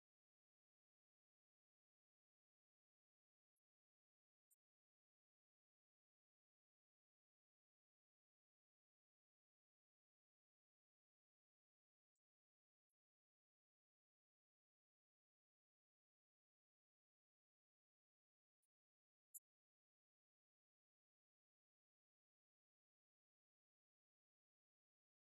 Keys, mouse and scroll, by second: 9.2 middle click, 11.6 click.